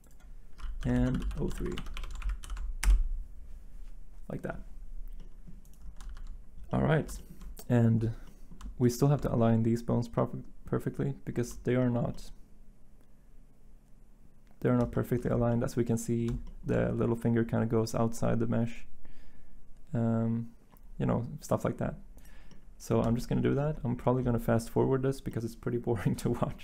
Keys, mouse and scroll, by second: 0.5-2.4 typing, 2.8 Return, 6.0 z.